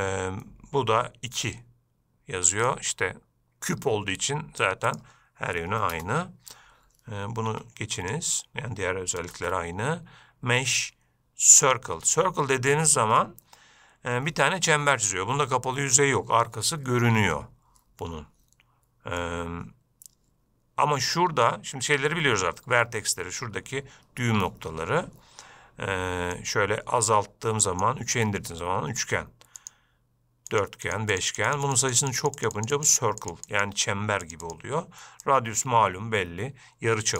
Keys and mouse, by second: 2.9-4.9 drag, 5.1-7.0 drag, 7.7 x, 9.5 shift+a, 12.3-13.0 middle drag, 17.5-19.4 middle drag, 26.7-28.0 drag, 29.8 click, 30.7 click, 31.1 click, 31.4 click, 31.5 click, 31.7 click, 31.9 click, 32.1 click, 32.2 click, 32.4 click, 32.6 click, 32.8 click, 33.0 click, 33.4 click, 33.7 click, 34.5 click, 34.7 click, 35.5-37.1 drag.